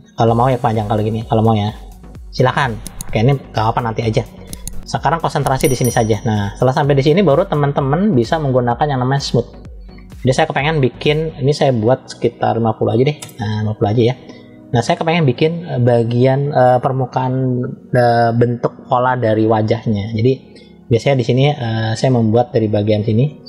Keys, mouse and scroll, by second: 0.5 click, 2.6 ctrl+z, 5.0-6.5 middle drag, 9.3 click, 11.6-13.1 drag, 14.8 middle click, 20.9 middle click, 21.8-22.3 scroll up 1, 22.3-23.4 scroll up 1.